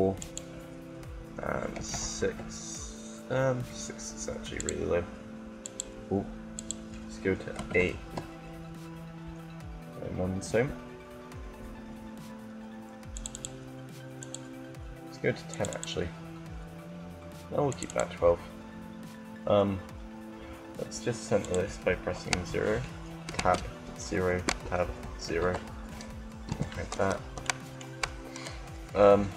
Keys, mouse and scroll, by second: 0.0-1.9 drag, 4.4-5.9 drag, 12.7 click, 15.2 click, 26.2 t, 27.3-29.3 middle drag.